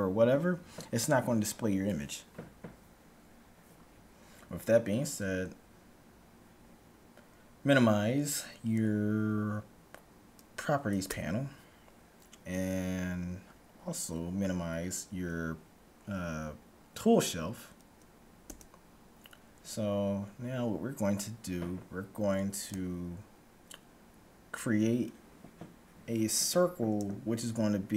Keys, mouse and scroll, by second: 11.0 n, 18.4 t.